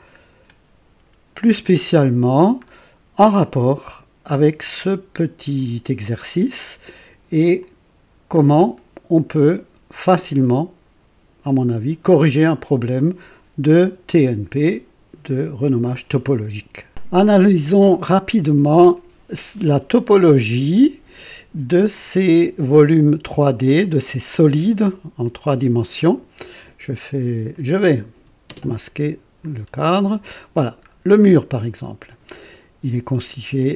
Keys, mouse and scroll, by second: 2.3-3.2 scroll down 2, 3.2-5.7 drag, 6.5 scroll up 1, 6.9-7.5 right drag, 7.6-10.4 drag, 12.2-14.0 drag, 16.9 click, 25.2-26.7 drag, 27.5 click, 28.5 space, 29.5 scroll up 3, 30.0 right click, 30.9 scroll down 1, 31.3-32.1 right drag.